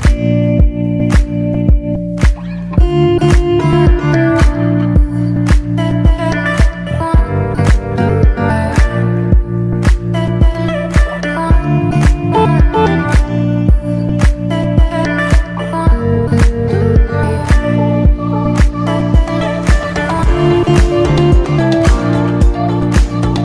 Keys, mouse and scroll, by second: 0.0 click, 2.0 g, 2.7 click, 2.8 alt+a, 3.3 ctrl+s, 3.7 click, 4.3 h, 4.6 click, 5.6 click, 6.2-6.5 shift+middle drag, 6.5 alt+a, 6.7-7.2 middle drag, 7.2 ctrl+s, 7.4 scroll up 2, 7.6-8.4 middle drag, 8.4 ctrl+s, 8.7 click, 10.7 click, 11.4-12.1 scroll down 1, 12.1-12.5 drag, 12.5-13.3 scroll down 1, 13.3 click, 14.2-14.5 middle drag, 14.5 ctrl+s, 14.8 alt+a, 15.1 ctrl+s, 15.4 click, 16.6 ctrl+s, 18.3 click, 19.3-21.8 drag, 21.8-22.7 scroll down 2, 22.7 click, 23.1-23.4 drag.